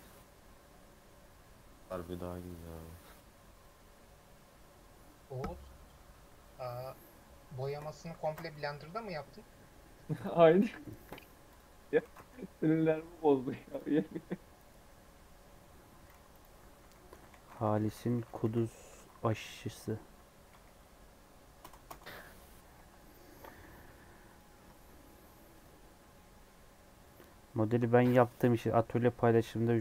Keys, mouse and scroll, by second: 11.4 click, 12.0 ctrl+s.